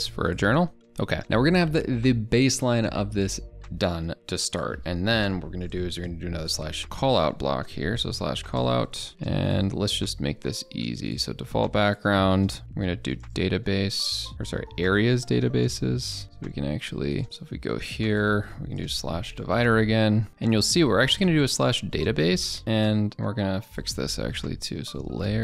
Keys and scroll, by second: 17.2 alt+Tab.